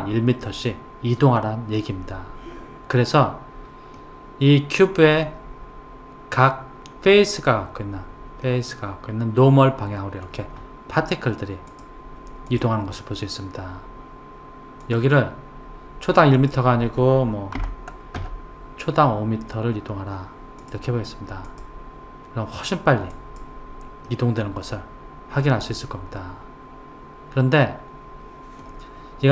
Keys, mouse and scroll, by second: 3.9-7.0 middle drag, 8.5-11.5 middle drag, 11.7-15.1 drag, 16.4 click, 20.6 click, 21.5 click, 24.1-27.1 middle drag.